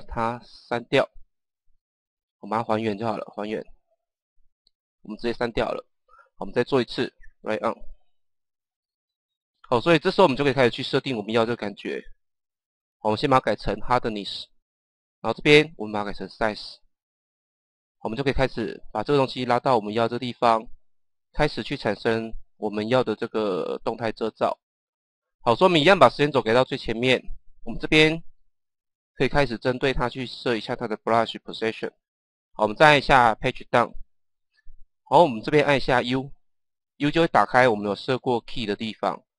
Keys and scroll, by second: 5.8 Delete, 33.7 Page_Down, 36.2 u.